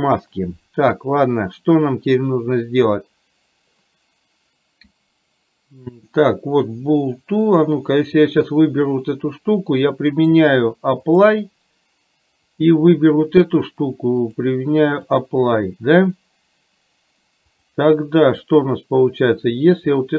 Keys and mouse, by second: 7.6 click, 10.2-11.3 drag, 12.5 click, 14.3-15.5 drag, 18.3 click.